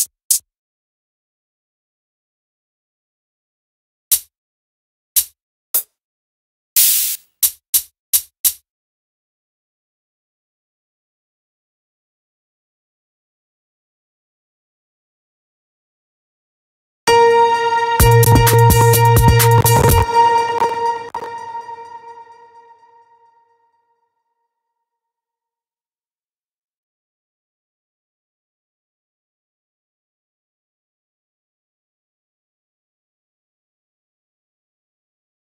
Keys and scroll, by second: 16.5 space, 19.5 space.